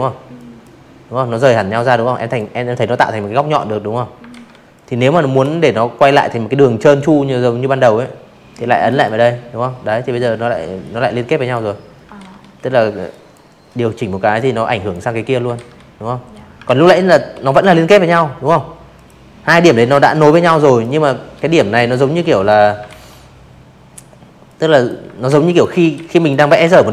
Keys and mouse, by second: 1.3 ctrl+z, 1.7 click, 5.8 click, 7.8-8.4 drag, 9.1 ctrl+z, 10.0 click, 11.3-11.8 drag, 12.5 ctrl+z, 13.6 ctrl+z, 14.2 v, 14.5 click, 15.9 click, 16.4 a, 16.7 click, 17.5 click, 18.7 click, 19.1 click, 19.8 ctrl+z, 21.4-21.8 drag, 22.2 ctrl+z, 22.5 click, 22.6-24.4 typing, 23.2 click, 24.1 click, 24.9 click, 25.8 p, 26.5 click.